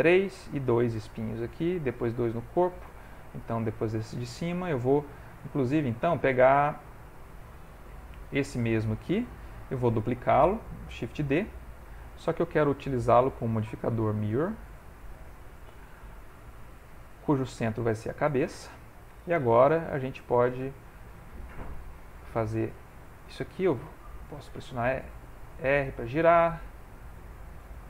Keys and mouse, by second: 2.5 shift+middle click, 3.3 middle click, 3.8 ctrl+middle click, 4.2 shift+middle click, 4.8 middle click, 5.3 shift+middle click, 8.0 middle click, 11.5 shift+d, 12.8 click, 20.4 click, 21.0 click, 22.1 click, 22.8 shift+middle click, 23.7 r, 25.8 s, 27.6 g.